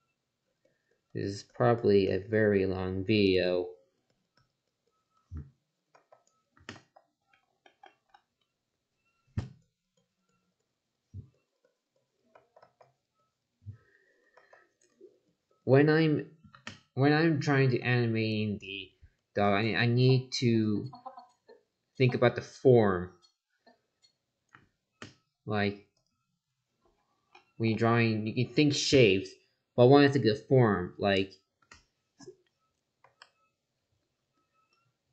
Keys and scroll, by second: 5.9 ctrl+z, 12.3 ctrl+z, 14.3 ctrl+z, 33.0 ctrl+z.